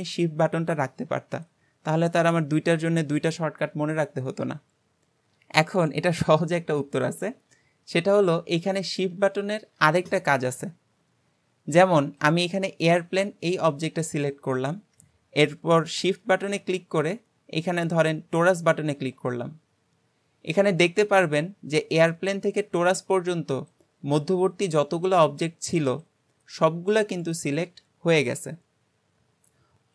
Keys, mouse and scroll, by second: 12.2 click, 18.3 shift+click.